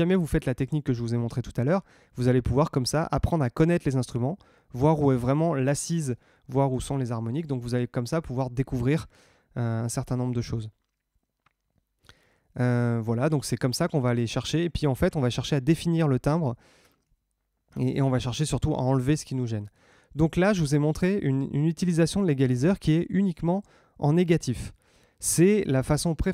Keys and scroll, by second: 16.9 super+Tab.